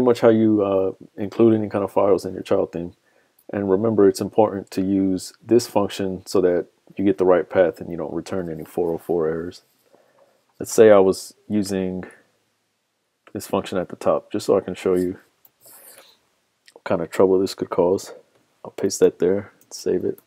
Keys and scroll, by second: 0.2 super+Tab, 15.4 super+c, 18.9 super+v, 19.7 super+s.